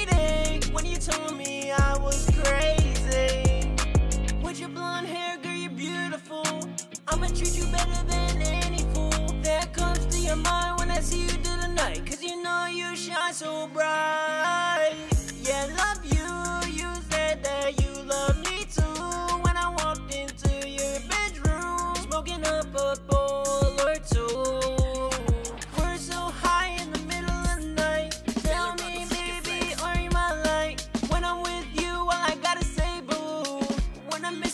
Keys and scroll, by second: 18.7 super+s, 33.3-34.4 typing.